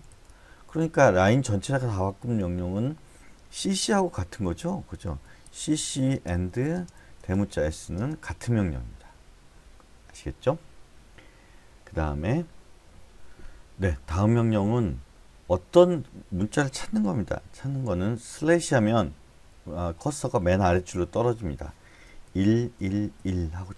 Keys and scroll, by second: 0.0-2.2 typing, 3.6 c, 3.9 c, 5.4-7.1 typing, 9.1 Escape, 18.4 /, 22.3 1, 22.7 1, 23.1 1.